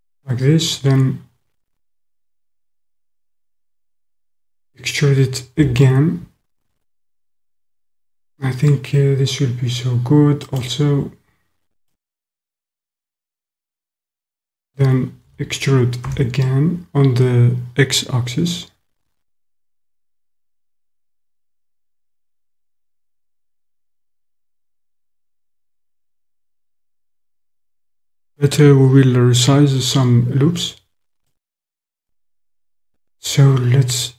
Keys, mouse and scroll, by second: 4.5 e, 5.6 x, 12.2 middle click, 15.3 e, 16.1 x, 23.0 click, 24.5 click, 24.6-26.1 middle drag, 31.2 middle click.